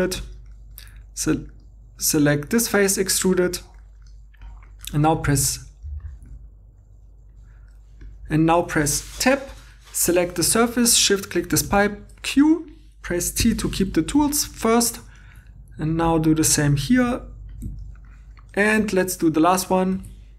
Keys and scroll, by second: 9.6 Tab, 11.7 q, 13.4 t, 16.7 g, 18.8 2, 19.9 shift+d.